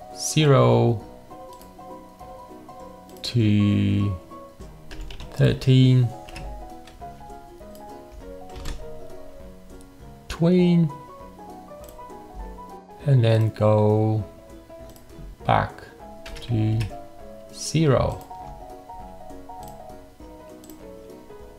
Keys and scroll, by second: 4.7-6.0 typing, 6.3 Return, 8.5 ctrl+4, 16.3 0, 16.7 Return, 18.9 ctrl+4.